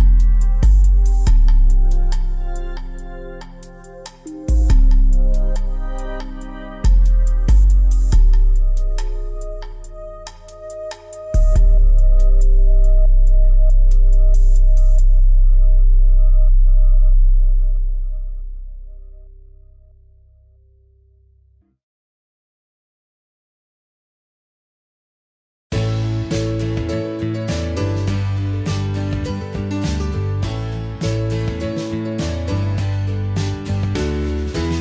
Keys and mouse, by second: 1.0 l, 10.5 a, 10.9 alt+h, 11.2 a, 26.7 a, 31.6 ctrl+p.